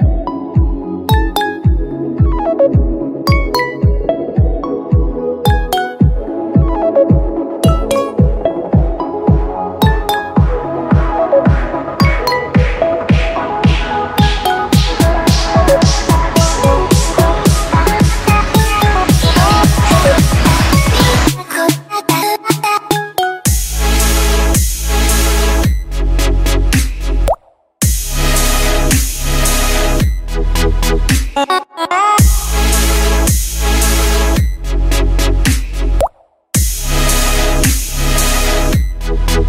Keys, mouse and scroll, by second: 2.1 super+z, 7.2 super+z, 7.6 super+z, 13.1 super+z, 29.6 super+z.